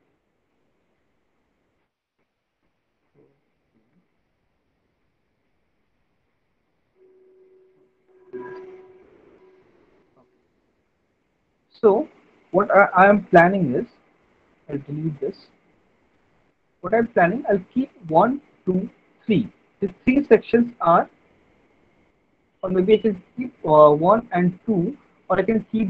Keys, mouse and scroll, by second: 2.7 middle click, 3.9 alt+middle click, 4.6 middle click, 5.6 alt+middle click, 6.6-7.9 ctrl+z, 11.1 middle click, 11.5 click, 12.6 click, 13.6 Delete, 14.2 click, 14.8 Delete, 21.3 alt+middle click, 21.8 middle click.